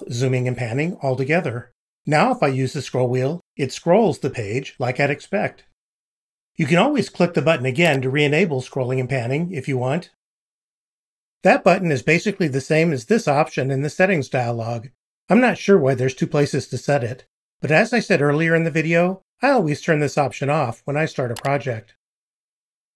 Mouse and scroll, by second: 3.2 scroll down 2, 3.6 scroll up 2, 3.8-4.2 scroll down 2, 9.3-9.8 scroll down 2, 9.8-10.1 scroll up 2, 10.3-11.3 drag.